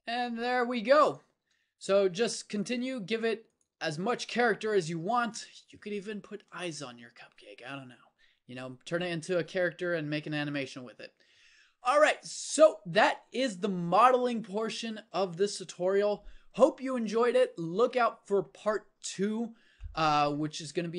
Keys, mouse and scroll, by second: 1.3 Tab, 1.9 Tab, 2.5 g, 3.7 Tab, 6.7 a, 17.6-20.9 middle drag.